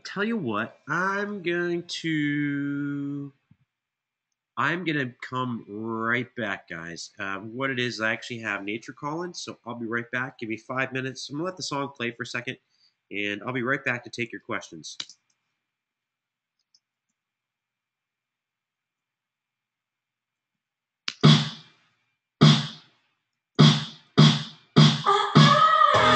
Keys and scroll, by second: 11.6 shift+Return, 14.8 alt+f, 14.8 space, 16.4 space, 16.8 super+=, 20.3 super+=, 20.8 space, 23.4 super+].